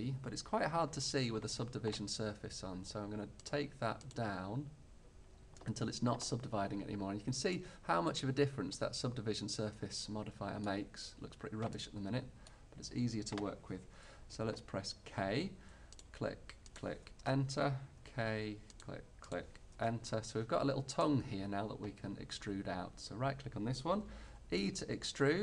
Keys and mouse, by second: 3.5-6.0 middle drag, 7.0 middle click, 8.2-9.6 middle drag, 11.9-15.2 middle drag, 15.2 k, 18.2 k, 21.0 click, 21.4 click, 21.6 click, 22.1 right click, 23.0-24.4 middle drag, 24.4 e.